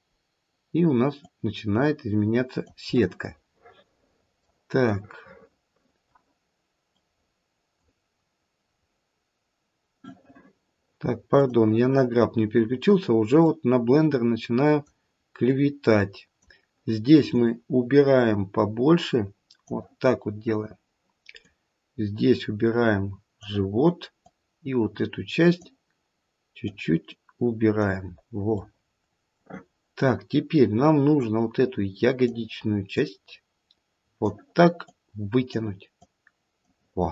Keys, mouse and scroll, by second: 0.1-1.2 scroll up 1, 1.2 click, 3.2 middle click, 3.6 middle click, 3.8 middle click, 4.8 middle click, 4.8 scroll up 1, 5.0 middle click, 6.9 click, 8.1-9.8 scroll down 2, 11.5 click, 13.4 click, 15.5 click, 17.2 click, 21.4 click, 24.2 click, 26.7 click, 28.0-28.5 scroll down 3, 28.5 middle click, 29.6-31.2 scroll up 1, 31.2 click, 31.2-31.5 scroll up 2, 33.0 click, 34.9 click, 36.0 click, 36.9-37.1 scroll down 2.